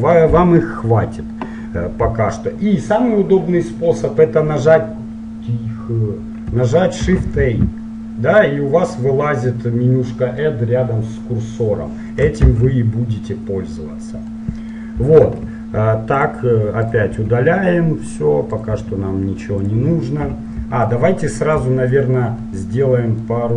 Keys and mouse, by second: 7.0 shift+a, 12.6 shift+a, 14.5-15.5 middle drag, 15.5 Delete, 17.2 Delete, 18.9 Delete, 22.4 click, 22.6-23.5 middle drag.